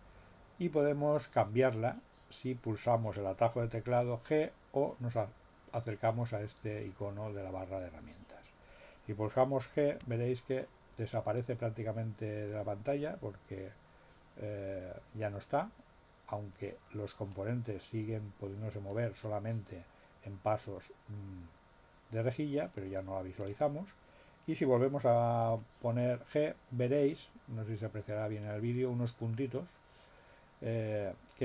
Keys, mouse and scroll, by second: 10.0 g, 17.3-19.1 drag, 19.2-22.9 drag, 23.3 click, 25.5 g.